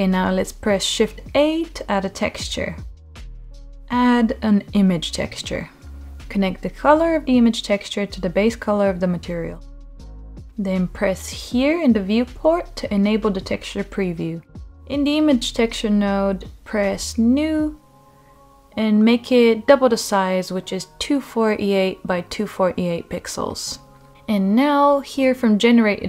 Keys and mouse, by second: 0.6 shift+a, 8.2-10.0 drag, 12.7 click, 14.2-26.0 drag.